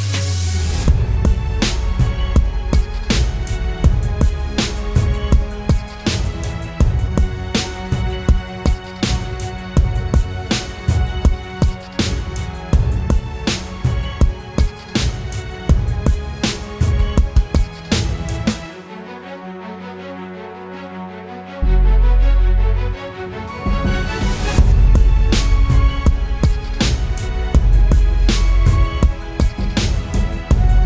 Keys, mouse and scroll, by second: 2.3 double click, 4.6 double click, 26.9-28.3 typing, 28.9 double click.